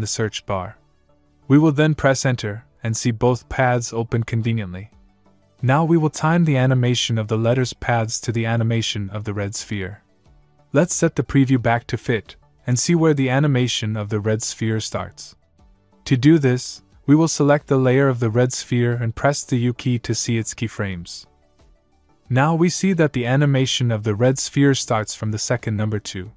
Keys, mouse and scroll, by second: 0.2 click, 0.8-1.8 typing, 2.7 Return, 9.1 scroll down 1, 11.5 click, 18.5 click, 20.0 scroll down 1, 22.2 u.